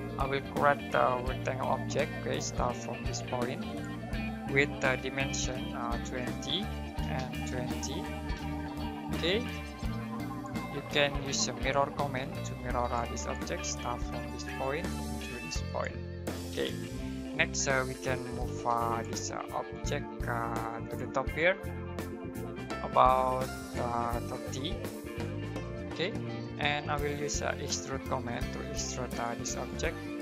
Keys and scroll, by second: 1.0-2.4 typing, 4.7-7.0 typing, 9.4 space, 11.2-12.1 typing, 13.6 space, 18.5 typing, 20.4 space, 25.1-28.4 typing, 29.9 space.